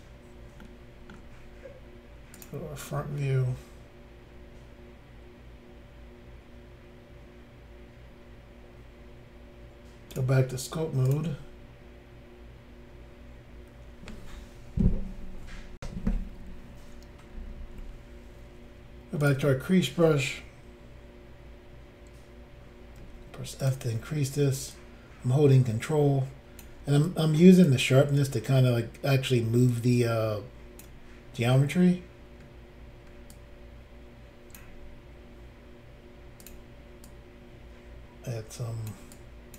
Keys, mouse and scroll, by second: 0.6 shift+middle click, 2.4 click, 3.0 scroll up 2, 10.1 click, 11.0 click, 11.1 click, 15.8 Insert, 19.2 click, 23.0 f, 23.6 click, 24.7 ctrl+click, 27.1 ctrl+click, 29.7 ctrl+click, 33.3 ctrl+click, 36.4 click, 36.5 click, 37.1 click, 39.1 click.